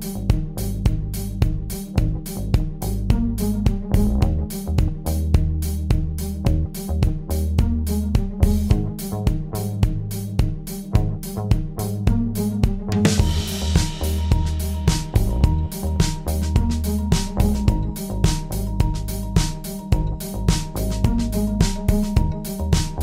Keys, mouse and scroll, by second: 1.4 space, 1.8 alt+click, 2.2 ctrl+alt+click, 6.5 alt+click, 7.0 alt+click, 7.6 ctrl+alt+click, 8.4 alt+click, 9.0 alt+shift+click, 9.7 alt+click, 10.8 alt+click, 11.3 alt+click, 22.9 alt+click.